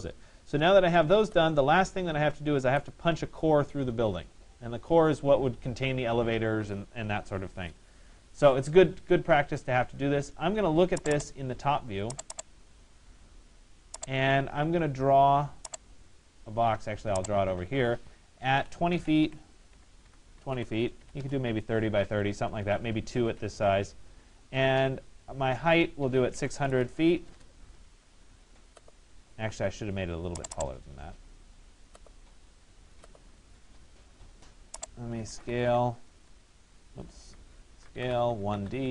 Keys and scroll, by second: 20.8 Return, 26.0 6, 35.8 Return.